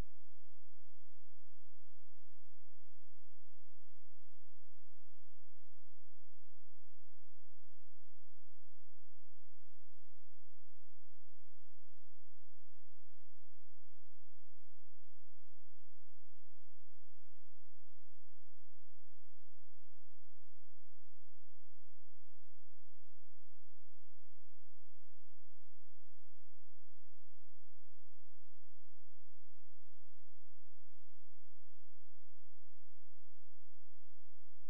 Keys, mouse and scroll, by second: 0.6 BackSpace, 2.2-3.3 typing, 5.1-14.8 typing, 15.1 ctrl+a, 17.6 Delete, 18.1 ctrl+space, 19.0 click, 19.6-20.6 scroll down 1, 20.6-21.1 scroll up 1, 24.1 click, 27.0 right click, 27.8 click, 30.0 shift+click.